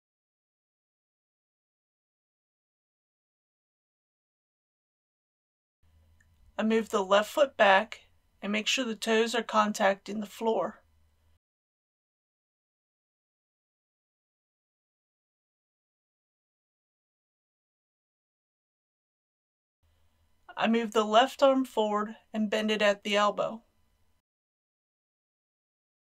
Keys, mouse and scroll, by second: 0.6 r, 2.5 click, 3.0 r, 4.1 click, 4.4 r, 5.4 click, 8.9 KP_1, 9.9-10.3 scroll down 1, 11.5 shift+middle click, 13.2-13.8 scroll down 1, 15.1 g, 16.0 click, 16.9-17.3 typing, 17.9 click, 18.6 click, 22.0 shift+middle click, 23.6 shift+g, 25.1 x.